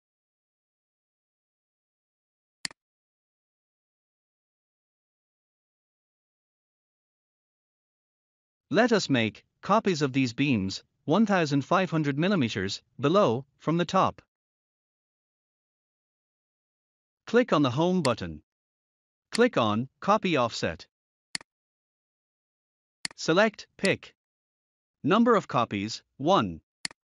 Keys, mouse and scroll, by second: 2.5 click, 3.7 scroll down 1, 7.3 scroll up 1, 8.8 scroll down 1, 9.3 scroll up 1, 17.9 click, 21.2 click, 22.9 click, 25.4 1, 26.7 click.